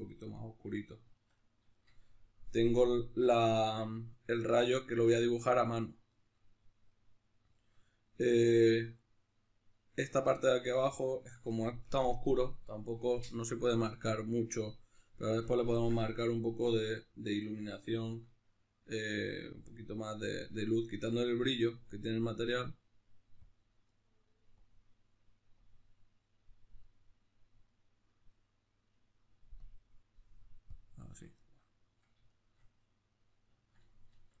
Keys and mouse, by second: 24.7-27.8 drag, 27.8-30.7 middle drag, 30.7 click, 31.4-34.4 middle drag.